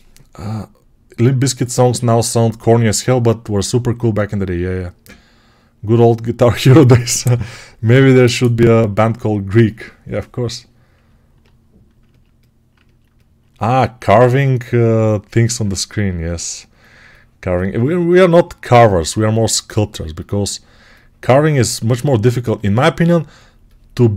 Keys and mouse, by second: 14.1 1.